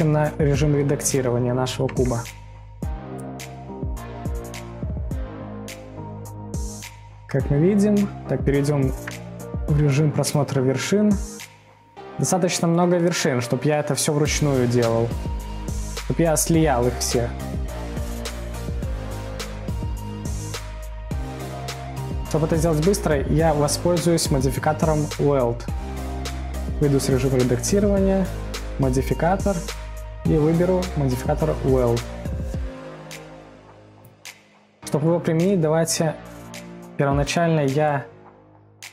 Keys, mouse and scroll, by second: 0.2-2.2 middle drag, 2.2 Tab, 2.9-4.8 middle drag, 4.7 scroll, 4.8-5.1 scroll down 1, 5.1-5.5 scroll up 1, 5.5 middle click, 6.0-9.3 scroll up 4, 9.3 scroll up 1, 9.4 1, 10.2 middle click, 10.9 scroll, 10.9-11.2 scroll down 2, 11.2-11.7 scroll up 2, 11.7-13.2 middle drag, 13.1 scroll, 13.2-14.9 scroll up 2, 14.9 scroll up 1, 14.9-15.6 scroll down 5, 15.6-17.2 middle drag, 17.2-18.0 scroll up 3, 18.0-18.4 scroll up 3, 18.4 middle click, 18.9-19.7 scroll down 4, 19.7-20.3 scroll down 5, 20.3-20.7 scroll up 1, 20.7-26.0 middle drag, 26.0 Tab, 28.5-31.7 drag, 33.7 scroll down 1, 33.8-37.0 scroll up 3, 37.5-38.9 drag.